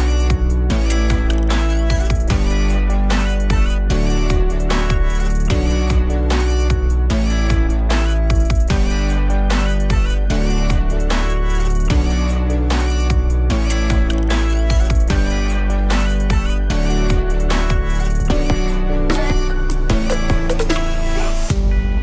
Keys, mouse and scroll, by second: 16.1 ctrl+z.